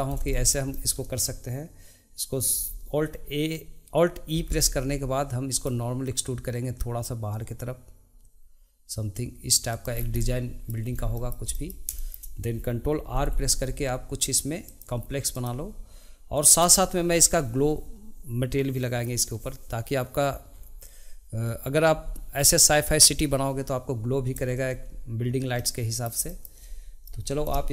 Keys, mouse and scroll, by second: 0.1 scroll up 1, 0.3-3.8 shift+middle drag, 4.3 e, 10.0 scroll down 1, 10.2-10.9 middle drag, 10.9 scroll up 2, 11.1-13.1 shift+middle drag, 13.1 ctrl+r, 25.5 shift+middle click, 26.3 shift+middle click, 27.2 middle click.